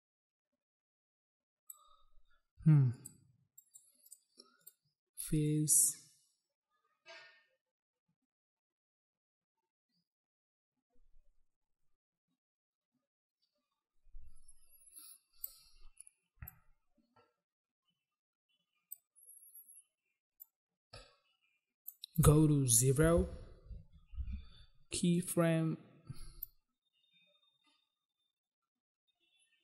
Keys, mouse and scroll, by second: 3.0 click, 3.2 click, 3.8 click, 3.9 click, 4.2 click, 4.3 click, 4.8 click, 4.9 click, 5.7 click, 16.7 click, 20.6 click, 22.3 click, 22.4 click, 23.4 0, 24.4 Return, 25.3 click, 25.4 click, 26.6 click.